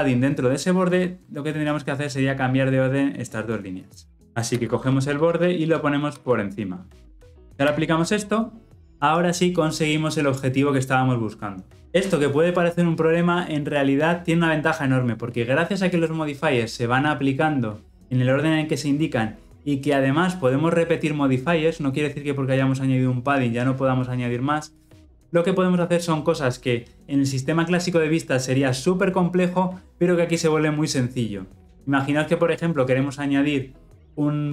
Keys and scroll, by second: 4.5 ctrl+x, 6.1 ctrl+v.